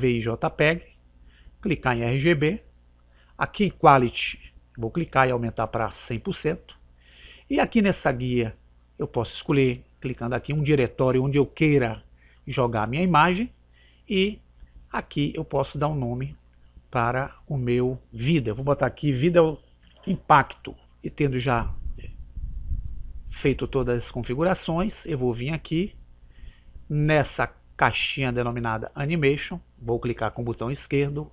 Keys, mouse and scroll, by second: 2.2 click, 5.0 click, 10.1 click, 12.6-14.1 drag, 15.4 click, 24.3 click, 31.2 click.